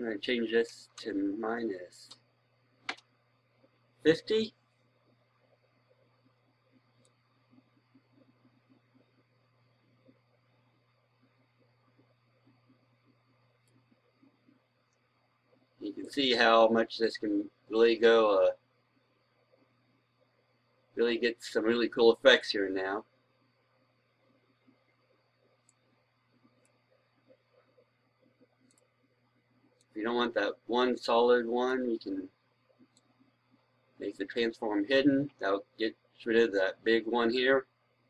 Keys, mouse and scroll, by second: 0.8 BackSpace, 2.0 KP_5, 7.8-38.0 drag.